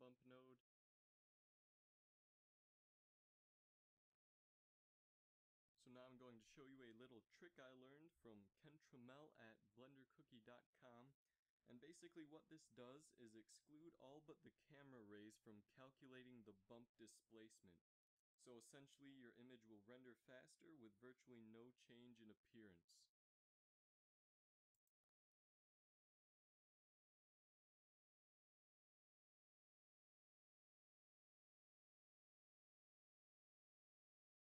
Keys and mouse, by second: 1.2-3.2 drag, 8.2 middle click, 10.5 shift+a, 17.8 shift+a, 19.7 z, 19.8 z, 20.8 shift+a, 27.5-29.3 drag, 30.5-32.8 drag, 33.7 g.